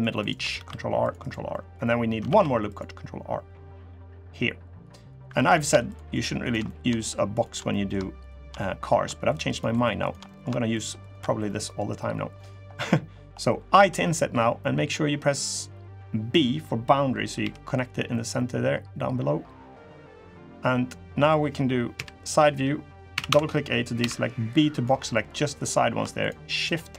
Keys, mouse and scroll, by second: 0.3 ctrl+r, 1.2 middle click, 1.6-1.9 scroll down 2, 2.0 ctrl+r, 5.1 3, 5.3 click, 5.6 shift+click, 5.9 shift+click, 6.2 shift+click, 6.4 middle click, 7.1 shift+click, 7.4 middle click, 7.9 shift+click, 8.3 middle click, 8.6 scroll up 1, 9.0 shift+click, 9.3 shift+click, 9.5 shift+click, 9.8 shift+click, 10.0 middle click, 10.2 scroll up 1, 10.5 shift+click, 10.8 shift+click, 11.2 middle click, 11.6-12.1 scroll down 3, 12.1 middle click, 12.1 scroll up 2, 12.5 middle click, 13.5 i, 20.2 middle click, 20.8-21.7 scroll down 1, 21.7 KP_3, 22.9 a, 23.0 a, 23.7 b, 24.9 middle click, 25.9 shift+click, 26.3 shift+click, 26.8 shift+click.